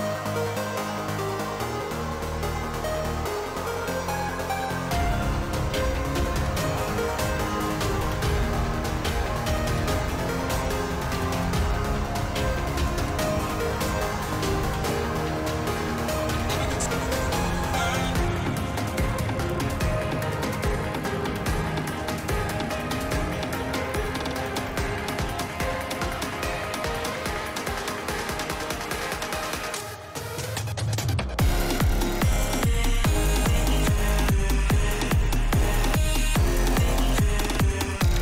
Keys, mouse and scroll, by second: 0.3 ctrl+z, 1.9-2.4 drag, 3.6 shift+middle click, 4.6 shift+middle click, 5.1 shift+middle click, 5.7-6.1 shift+middle drag, 6.2 shift+middle drag, 8.5 click, 10.1 shift+middle drag, 16.9-17.6 shift+middle drag, 18.3 shift+middle click, 19.0 shift+middle drag, 19.7 shift+middle click, 20.3 click, 20.6 click, 21.6 shift+middle click, 23.6 Tab, 25.7 g, 27.0 shift+middle click, 27.7 ctrl+click, 28.1 shift+middle click, 28.6 g, 29.9 shift+middle click, 30.4 shift+middle click, 32.4-35.9 drag, 37.6 shift+middle click.